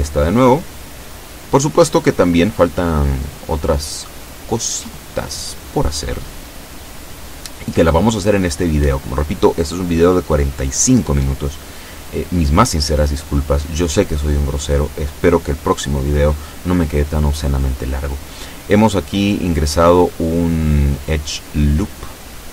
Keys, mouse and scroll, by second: 1.4 KP_7, 2.5 shift+middle click, 9.3 ctrl+r, 10.0 click, 11.4 right click, 12.3 shift+right click, 14.6 middle click, 15.9-17.4 shift+middle drag, 17.9 right click, 18.9 shift+right click, 19.6-21.7 shift+middle drag.